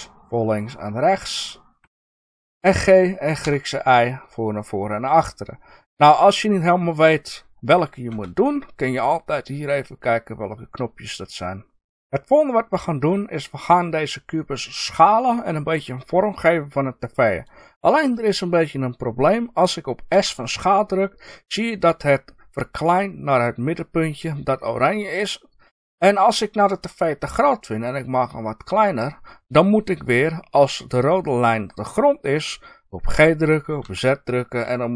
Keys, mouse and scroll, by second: 1.8 Escape, 2.5 g, 7.7 Escape, 28.9 click.